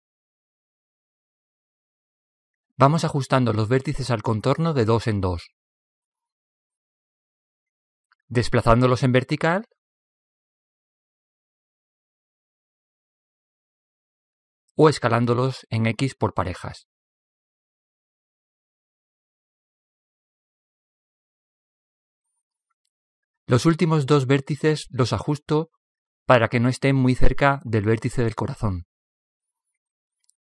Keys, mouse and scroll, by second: 2.7-4.2 middle drag, 4.2 right click, 4.4 middle click, 4.4 right click, 4.5 middle click, 4.7 right click, 5.2-6.2 middle drag, 6.2 click, 8.4-11.0 right drag, 10.0-11.8 drag, 10.0 typing, 13.6-15.1 right drag, 14.5 s, 18.4-20.8 right drag, 20.4 s, 22.1 s, 23.9-25.6 drag, 29.2 a, 29.6 a.